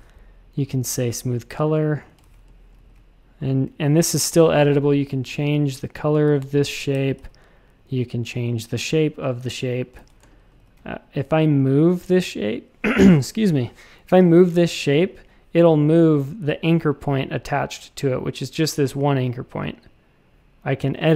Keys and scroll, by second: 2.2 shift+super+a, 2.4 space, 2.7 a, 4.2 i, 6.2 x, 6.9 shift+super+a, 9.9 shift+super+a, 10.2 space, 10.5 a.